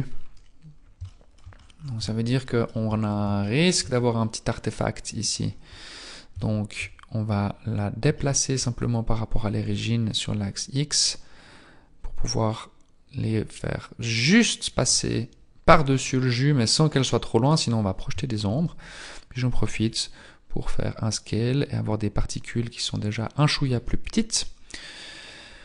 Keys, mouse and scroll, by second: 0.7 scroll down 1, 1.1 shift+middle click, 1.6 scroll up 6, 1.7-2.1 scroll down 1, 2.4 shift+middle click, 3.1-3.5 scroll up 2, 3.5 shift+middle click, 3.9 scroll up 2, 4.5-4.9 scroll up 1, 9.7 click, 9.7 scroll up 1, 16.0 middle click, 17.5-18.5 scroll down 3, 19.5 s, 23.7 Tab.